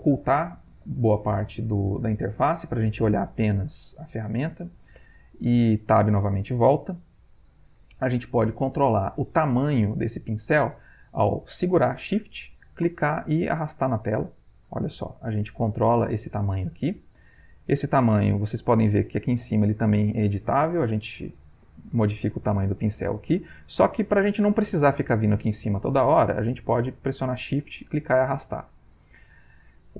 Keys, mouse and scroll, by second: 5.1 Tab, 12.8-18.9 shift+drag, 19.7-22.1 drag, 22.9-24.1 shift+drag, 26.4-29.2 shift+drag.